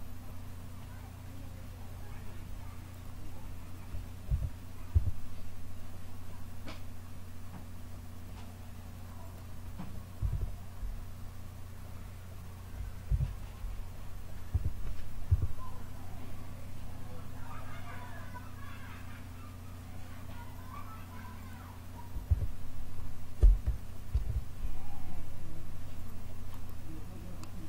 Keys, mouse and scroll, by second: 4.2 KP_7, 4.8 s, 10.1 KP_1, 13.0 KP_7, 14.4 e, 22.2 f, 24.0 ctrl+r.